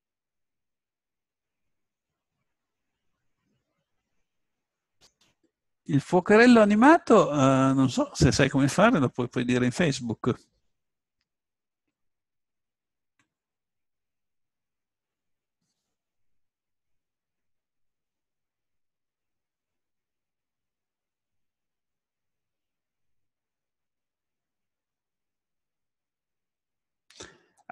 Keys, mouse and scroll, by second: 6.8-8.4 middle drag, 13.8-23.4 middle drag, 23.7-27.5 middle drag.